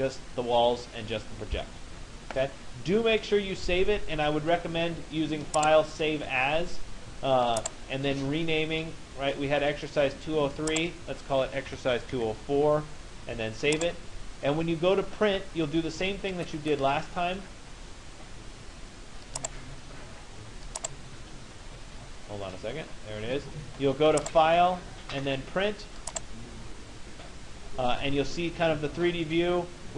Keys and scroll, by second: 11.3 BackSpace, 12.2 4.